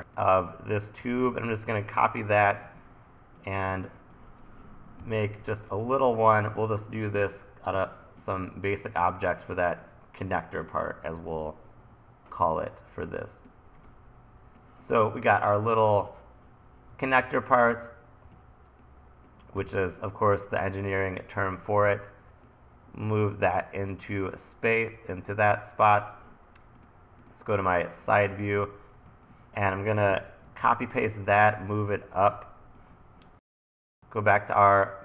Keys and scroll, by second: 1.0 super+c, 1.1 super+v, 3.7 1, 5.0 t, 7.8 1, 17.0 e, 19.6 t, 21.8 e, 29.1 1, 30.1 e, 30.5 super+c, 30.7 super+v, 31.3 d, 32.3 e.